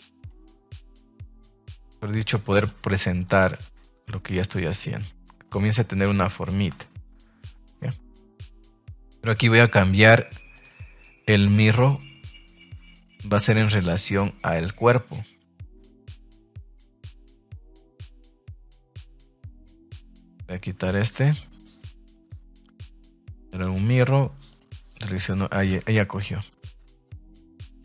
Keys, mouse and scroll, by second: 0.1 click, 0.3-0.7 middle drag, 0.7 scroll down 1, 0.9 scroll up 1, 1.3 g, 2.5 click, 2.8-3.2 scroll up 1, 3.5 g, 4.4 scroll up 1, 4.8 r, 5.4 click, 6.0 a, 6.4-7.5 middle drag, 6.4 a, 7.7-8.4 middle drag, 8.5 shift+middle drag, 9.2 right click, 9.5 middle click, 10.5 click, 11.7 click, 16.3 click, 16.7 click, 17.3 click, 18.4 click, 20.1 click, 21.0-23.5 drag, 26.1-26.5 middle drag, 26.8 middle click.